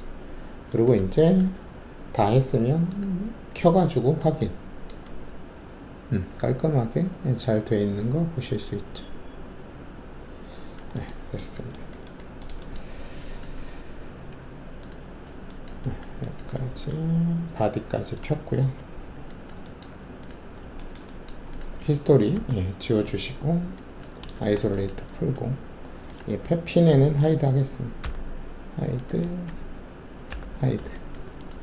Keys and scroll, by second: 13.6 alt+`, 22.3 alt+d, 24.3 alt+shift+a, 28.0 h, 30.2 h.